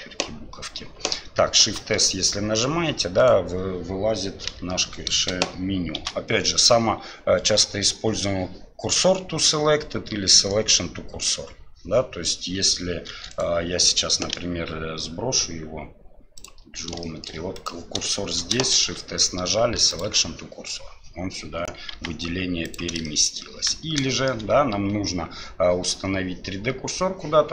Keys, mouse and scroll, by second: 1.6 shift+s, 4.5 n, 5.9 shift+s, 14.3 w, 17.0 shift+middle drag, 17.5 click, 18.1 shift+middle drag, 18.8 shift+s, 22.7 g, 23.0 middle drag, 24.1 middle drag.